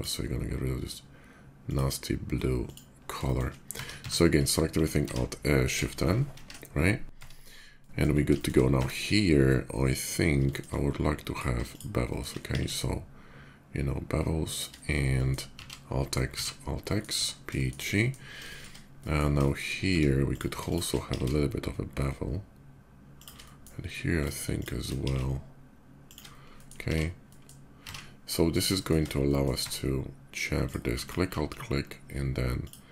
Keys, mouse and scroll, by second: 1.4 click, 2.4 click, 3.0 shift+middle click, 3.5 Tab, 3.7 a, 3.8 Tab, 4.8 alt+n, 6.1 shift+n, 6.7 Tab, 7.4-7.8 middle drag, 7.9 scroll down 1, 8.1 shift+middle drag, 8.5 Tab, 8.9 middle click, 10.2 shift+middle click, 11.0 shift+click, 11.4 shift+click, 11.8 shift+middle click, 12.3 ctrl+b, 13.0 middle click, 14.3 shift+click, 14.5 shift+middle click, 14.8 shift+middle click, 15.3 alt+x, 15.8 middle click, 16.1 alt+x, 16.6 middle click, 16.9 Tab, 17.3 middle drag, 17.7 middle click, 18.2 middle drag, 18.7 middle click, 19.2 shift+middle click, 19.7 Tab, 20.0 click, 20.4 shift+click, 20.8 ctrl+b, 22.9 shift+click, 23.1 shift+middle click, 23.9 shift+click, 24.3 shift+click, 24.8 ctrl+b, 25.8 click, 26.3 middle click, 27.0 alt+x, 27.0 middle click, 27.8 alt+x, 28.0 middle click, 28.5 shift+middle click, 28.9 shift+middle click, 29.3 Tab, 30.4 click, 30.7 alt+click, 32.3 alt+click.